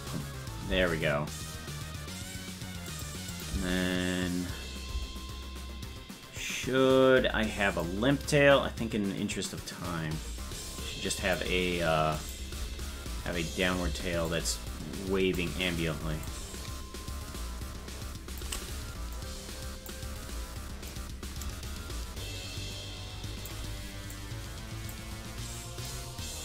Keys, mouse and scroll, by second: 2.9 click, 3.3 click, 3.5 space, 5.7 space, 7.8-11.4 drag, 12.2 click, 12.6 space, 14.3-15.4 drag, 14.3 space, 16.3-18.4 drag, 19.2 click, 20.9-23.5 drag, 24.2 click, 25.9-26.4 drag.